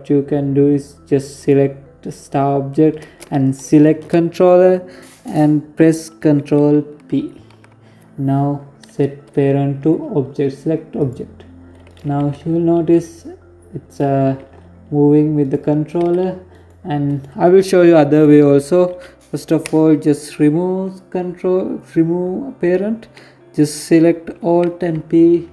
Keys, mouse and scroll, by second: 0.1 right click, 2.5 shift+right click, 5.9 ctrl+p, 10.7 right click, 11.0 g, 13.2 g, 14.8 g, 15.8 right click, 24.4 right click, 25.0 alt+p.